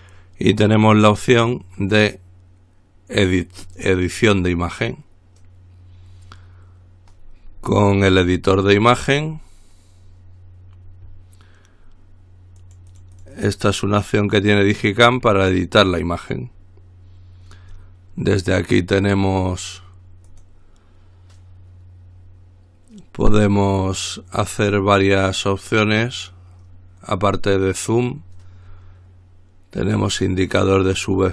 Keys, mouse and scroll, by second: 3.8 click, 7.7-8.3 scroll up 1, 8.3 click, 9.1-9.5 scroll up 1, 9.5-10.2 scroll down 2, 12.8-14.2 drag, 14.4 click, 20.5 click, 30.2 click.